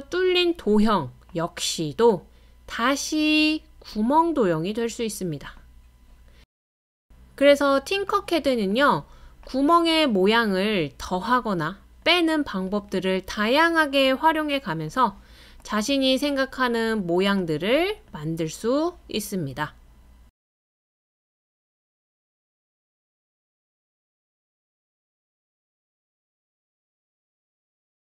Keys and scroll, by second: 10.1 super+c, 10.3 super+v.